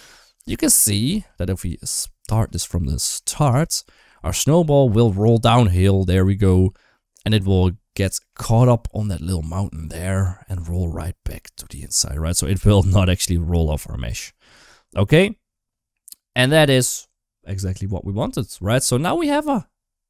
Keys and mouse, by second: 0.0 click, 0.2 space, 0.9 space, 1.5 click, 2.1 space, 3.1 shift+middle click, 3.5 middle click, 4.0-6.3 middle drag, 6.8 middle click, 7.8-13.2 shift+middle drag.